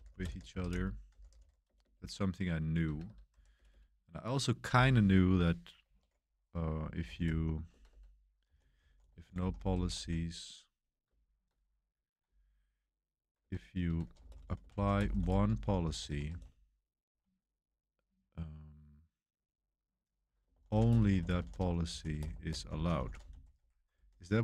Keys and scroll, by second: 0.0-3.6 typing, 6.7-11.0 typing, 12.2-16.3 typing, 20.2-24.4 typing.